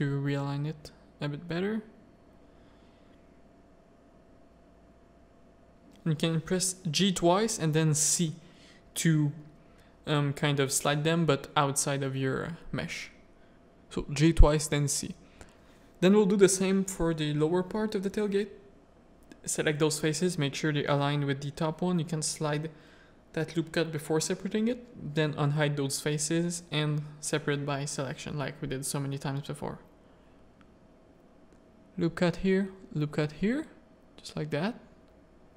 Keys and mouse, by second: 0.0 Tab, 0.4 Tab, 0.9 Tab, 1.3 Tab, 2.8 g, 5.8 click, 6.3 g, 7.2 Tab, 7.5 alt+a, 7.8 z, 8.9-10.2 middle drag, 10.3 Tab, 10.9 middle click, 11.6 3, 12.2 1, 13.4 g, 15.0 g, 16.4 3, 16.7 alt+click, 17.7 alt+shift+click, 20.2-22.0 typing, 21.0 shift+click, 23.6 z, 23.9 z, 24.6 middle click, 25.1 alt+h, 25.8-27.6 drag, 27.7 Tab, 28.2 alt+a, 28.7 Tab, 28.9 ctrl+r, 30.6 Tab, 30.8 click, 31.3 ctrl+Tab, 31.3 ctrl+r, 34.5 Tab.